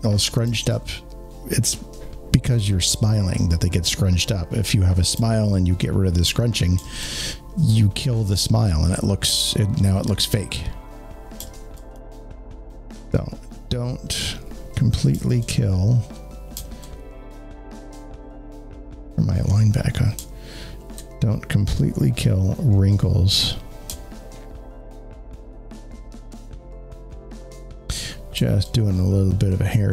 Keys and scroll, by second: 11.8 alt+space.